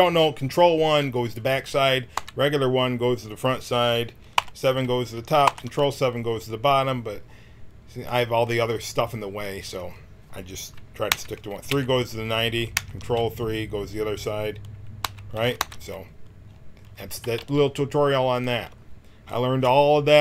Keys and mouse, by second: 2.1 KP_1, 4.3 KP_7, 5.4 ctrl+KP_7, 11.0 KP_1, 11.6 KP_3, 12.7 ctrl+KP_3, 15.0 KP_1, 15.5 ctrl+KP_1, 17.2 g.